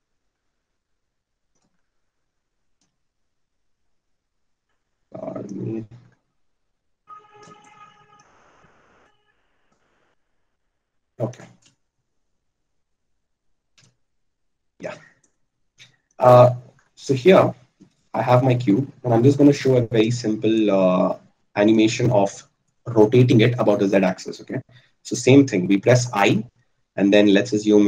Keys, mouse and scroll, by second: 26.5 i.